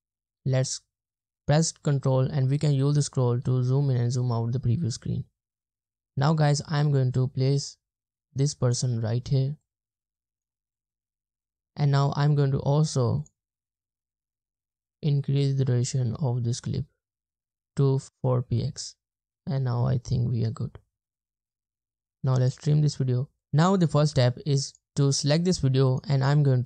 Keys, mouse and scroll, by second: 0.3 ctrl+scroll down 1, 2.3-2.6 ctrl+scroll down 1, 2.6 ctrl+scroll up 1, 2.9 ctrl+scroll down 1, 3.2-3.6 ctrl+scroll up 1, 3.6 ctrl+scroll down 1, 3.9-4.4 ctrl+scroll up 1, 4.4-4.9 ctrl+scroll down 1, 6.2 ctrl+scroll down 1, 18.1 space, 18.9 space, 20.4 space, 20.9 space, 25.9 right click.